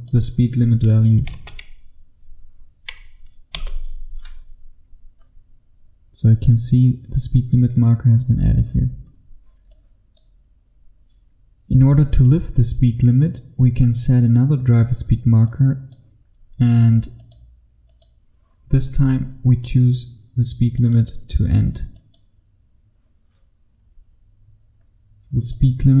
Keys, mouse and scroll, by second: 1.3 KP_3, 1.5 KP_0, 3.6 Return, 4.8-9.0 scroll up 1, 9.0-9.8 scroll down 1, 9.8 click, 10.8-15.6 scroll down 1, 15.6 click, 16.3-17.3 scroll up 1, 17.3 click, 23.9-24.8 scroll up 1, 24.8-25.5 scroll down 1, 25.5 click.